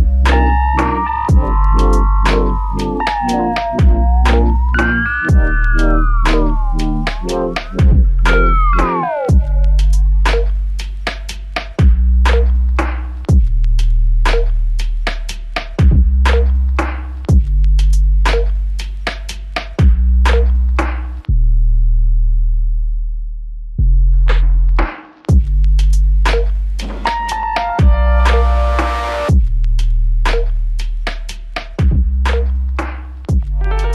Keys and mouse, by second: 3.4 alt+click, 4.4 alt+click, 6.2 double click, 7.6 shift+click, 7.8 shift+double click, 15.8 shift+click, 17.0 shift+click, 18.1-18.8 typing, 20.0 ctrl+alt+click, 20.8 alt+click, 23.1 double click, 29.8 alt+click, 31.5 double click, 32.3 alt+click, 33.4 double click.